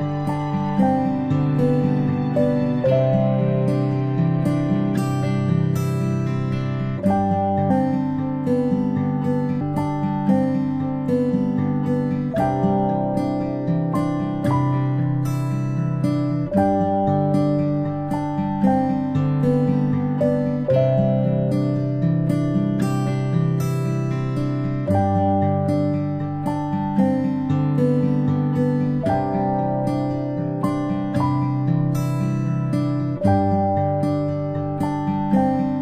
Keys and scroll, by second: 2.7-3.1 ctrl+alt+space, 11.7 ctrl+alt+z, 21.8 alt+a, 26.8 space, 31.0 space, 31.2 space, 31.4 space, 33.4 a, 35.1 typing.